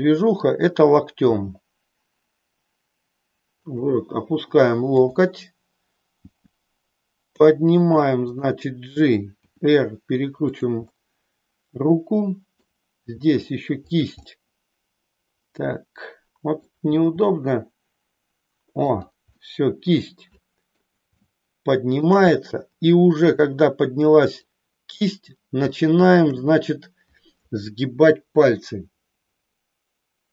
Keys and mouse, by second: 1.2 g, 4.9-6.2 drag, 6.3 g, 8.5 click, 9.5 r, 10.6 click, 10.9-12.7 middle drag, 13.2 r, 13.9 click, 14.3-16.7 middle drag, 16.8 r, 18.9 click, 19.5-20.8 middle drag, 21.2 shift+middle click, 23.3-24.5 middle drag, 25.8 shift+middle click.